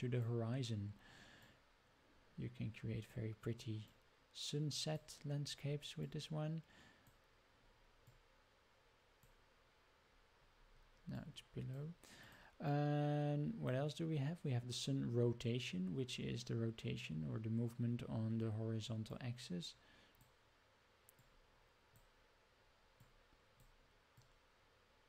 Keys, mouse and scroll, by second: 1.4-3.1 drag, 3.9-4.9 drag, 6.0-7.1 drag, 8.1-9.3 drag, 11.1-12.3 drag, 12.7-13.7 drag, 19.1-20.2 drag, 21.2 click, 23.0 click, 24.1-25.0 drag.